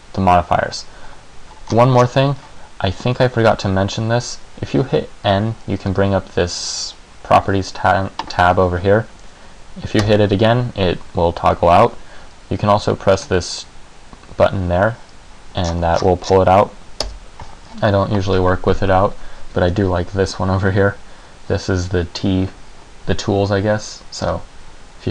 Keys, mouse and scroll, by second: 1.9-2.7 scroll up 11, 2.7-3.8 scroll up 2, 5.4 n, 6.1 n, 10.1 n, 13.3 click, 15.7-17.1 scroll down 19, 17.1 n.